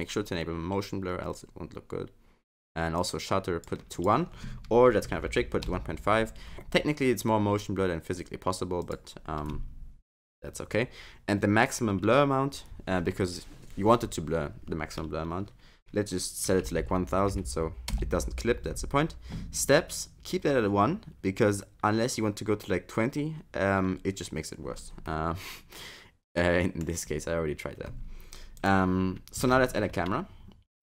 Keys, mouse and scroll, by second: 3.0 click, 3.9 click, 8.8 click, 16.8 0, 25.1 middle click, 27.1-27.7 scroll up 1, 28.0-28.6 scroll down 3, 28.6 click.